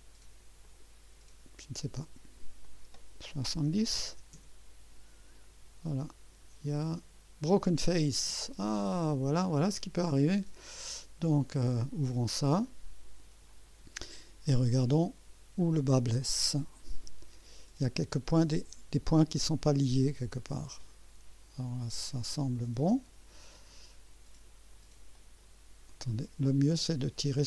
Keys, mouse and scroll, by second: 0.6 click, 2.6 click, 3.9 KP_7, 4.0 KP_0, 4.3 Return, 5.9-7.8 drag, 8.7 click, 9.7 scroll up 1, 11.4 click, 12.6-13.3 right drag, 13.5 scroll up 1, 13.9 scroll down 1, 14.1 scroll up 1, 14.6-15.3 right drag, 16.2 scroll up 1, 18.1-18.8 right drag, 19.1 scroll up 1, 20.6-23.8 drag, 25.1-26.0 drag, 26.8-27.4 drag.